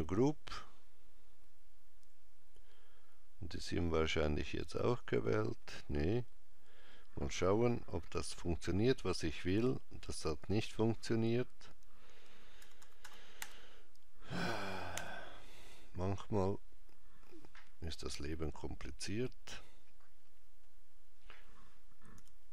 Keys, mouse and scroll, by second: 3.6 click, 4.7 click, 7.9 g, 12.4 ctrl+z, 12.6 ctrl+z, 22.0 a.